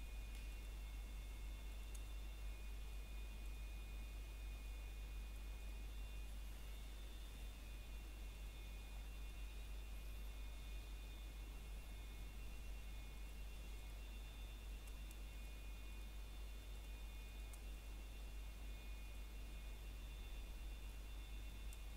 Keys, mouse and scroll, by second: 1.8 s, 4.8 click, 9.1 scroll down 1, 9.3 middle click, 10.4 scroll up 1, 11.7 click, 15.5 middle click, 15.9 scroll up 1, 17.1 middle click, 18.4 alt+shift+click, 20.1 middle click, 21.0 click.